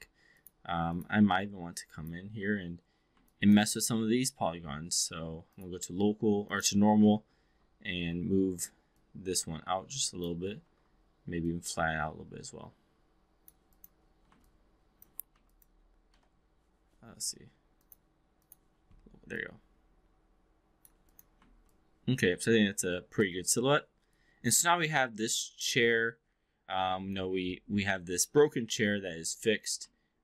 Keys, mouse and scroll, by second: 0.2 click, 0.9 click, 1.3 3, 1.7 4, 1.9 click, 2.3 2, 3.2-3.5 alt+drag, 5.6-6.7 drag, 6.8 2, 7.5 2, 8.1 w, 8.9-10.3 drag, 10.4 e, 10.6 r, 11.4-13.5 drag, 13.7 click, 14.5-15.1 alt+drag, 15.3 2, 15.5 click, 16.0 w, 17.7-18.7 drag, 19.3-20.9 drag, 21.7-23.3 alt+drag, 23.7 alt+middle click, 24.1-27.2 alt+drag, 27.9 alt+middle drag.